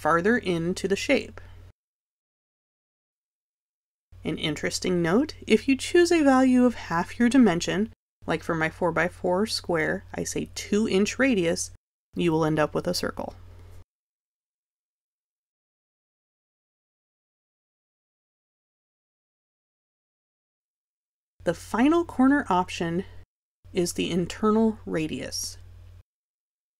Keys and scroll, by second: 0.1 1, 9.5 2.